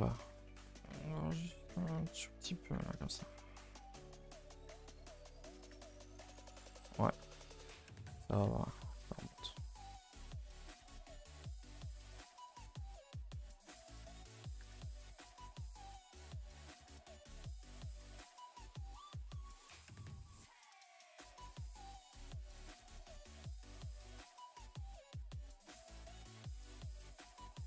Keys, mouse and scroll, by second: 0.4 ctrl+z, 0.9 ctrl+z, 2.0 ctrl+z, 2.8 g, 4.7 Tab, 5.6 click, 6.5 shift+middle click, 6.7 scroll up 1, 7.1 click, 7.3 shift+middle drag, 7.5 scroll up 2, 7.7 Tab, 8.0 a, 8.2 a, 9.1 1, 9.4 click, 9.7 g, 12.2-12.6 scroll down 2, 12.6 shift+middle click, 13.4 g, 14.2 click, 14.6 g, 16.4 click, 16.9 g, 18.3 r, 19.2 g, 20.1 click, 20.3 g, 21.9 Tab, 22.3 Tab, 22.7 click, 22.9 g, 26.9 click, 27.1 g.